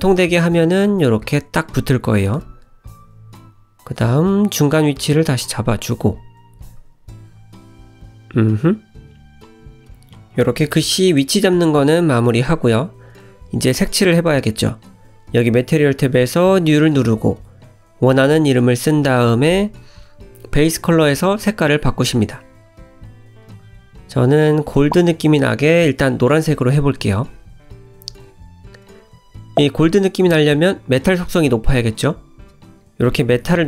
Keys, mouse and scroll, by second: 0.2 middle click, 0.9-1.2 scroll down 2, 1.2 `, 2.0-3.1 scroll down 4, 3.1 click, 3.6 g, 4.7-5.3 scroll down 4, 7.2 s, 7.7 g, 8.6-9.0 scroll up 3, 9.0 middle click, 9.9 click, 11.2 shift+middle click, 12.0 middle click, 12.2 scroll up 4, 13.0 click, 13.5 middle click, 15.0 click, 15.6 click, 16.6 click, 20.4 click, 28.9 click, 31.7 click.